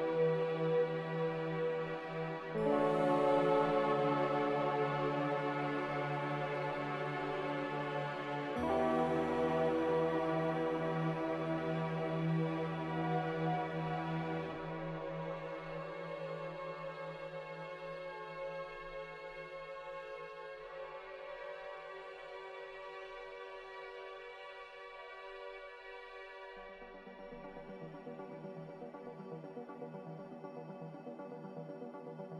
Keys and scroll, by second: 2.0 Delete, 2.5 a.